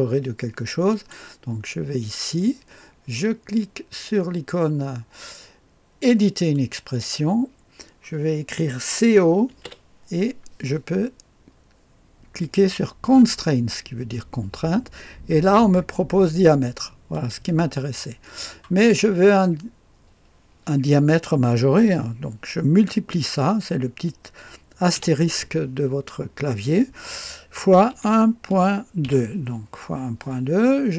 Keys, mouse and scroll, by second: 0.9 click, 6.5 click, 9.2-10.1 typing, 13.1 click, 17.1 click, 24.9 KP_Multiply, 27.9 KP_1, 28.5 -, 29.0 KP_2.